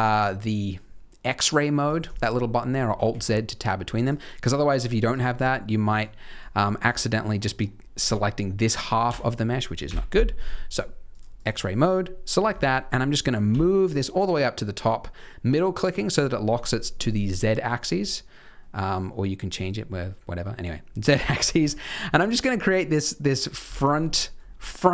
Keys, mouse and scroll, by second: 1.7 click, 2.0 click, 2.8 alt+z, 3.0 alt+z, 3.5-3.9 scroll down 2, 3.9 click, 5.0 click, 5.8 click, 6.4 click, 6.9 middle click, 7.4 middle click, 8.0 g, 9.8 KP_3, 11.1 click, 11.3 click, 11.9 click, 12.4-12.8 scroll down 3, 12.6 shift+middle click, 13.4 g, 21.4 scroll up 4, 21.6 shift+middle click, 22.1 g, 23.4 scroll down 3, 23.7 shift+middle click, 24.3 scroll down 2, 24.7 shift+middle click.